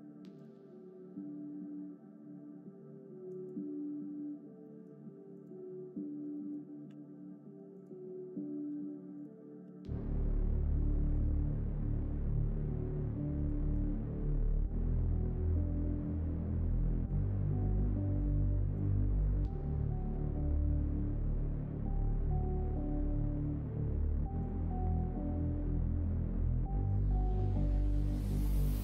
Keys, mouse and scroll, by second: 0.5 e, 4.6 middle click, 5.3 click, 6.3 middle click, 6.8 r, 8.6 r, 9.6 g, 16.5 middle click, 16.5 scroll up 1, 17.0 scroll down 1, 17.4 middle click, 17.6-18.2 scroll down 1, 19.2 shift+click, 19.5 middle click, 20.0 e, 22.9 s, 24.9 e, 26.8 e, 28.0 shift+click.